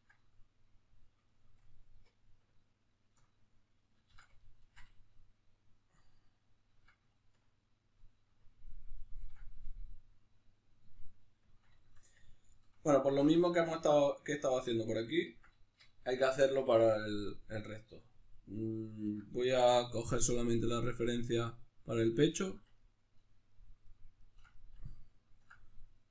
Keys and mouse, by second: 3.8 ctrl+z, 7.6 click, 8.1-21.8 ctrl+middle drag, 21.8 click.